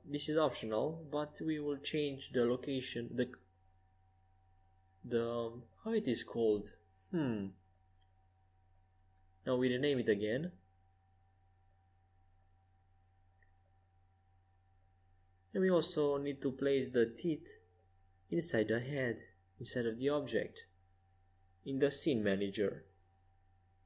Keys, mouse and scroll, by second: 0.6 ctrl+alt+shift+c, 3.5-7.1 right drag, 7.5-9.3 right drag, 8.8-10.9 drag, 11.7-13.9 drag, 15.3-19.4 drag, 20.1-23.8 drag.